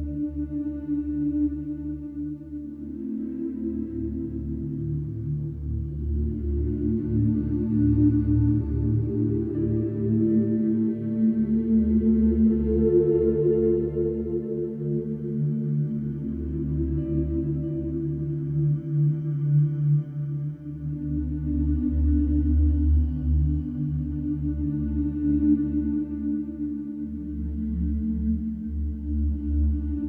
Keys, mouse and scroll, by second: 1.0 click, 1.6 g, 4.7 scroll down 1, 4.9-6.0 middle drag, 6.0 click, 6.6-7.3 middle drag, 7.3 click, 7.9 Tab, 8.2 click, 8.5-8.9 scroll up 1, 9.1-10.4 middle drag, 10.4-11.5 right drag, 11.5 click, 12.0-13.9 drag, 14.2 alt+middle click, 14.5 scroll up 2, 16.4 click, 17.7 shift+click, 18.0-19.2 middle drag, 19.2 scroll up 1, 19.5 shift+middle click, 19.9 scroll up 1, 20.2-20.7 scroll down 2, 21.2 e, 22.0 e, 23.8-25.8 middle drag, 25.8 scroll up 1, 26.0-27.0 shift+middle drag, 27.0 click, 27.3-28.8 middle drag, 28.8 shift+click, 29.8-30.0 drag.